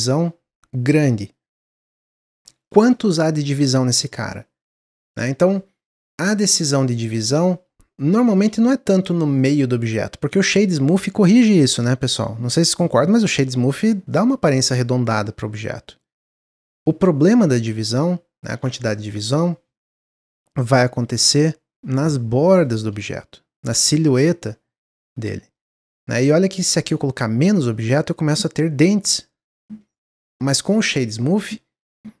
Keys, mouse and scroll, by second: 4.3-5.2 scroll up 4, 8.2 shift+middle click, 8.4-8.8 shift+scroll down 3, 8.8 Tab, 9.3-10.6 right drag, 10.6 scroll down 1, 12.4 click, 12.9-13.7 scroll down 3, 13.7 click, 14.1-16.8 middle drag, 16.8-17.2 scroll up 2, 17.2 ctrl+z, 17.5 ctrl+z, 17.9 ctrl+z, 18.4 ctrl+z, 18.9 shift+middle click, 19.8 ctrl+b, 22.2-24.8 scroll up 4, 22.5 shift+middle click, 24.8-25.8 scroll up 1, 26.6-29.7 drag, 29.9-30.3 scroll down 1, 30.3 Tab, 30.6-32.2 right drag.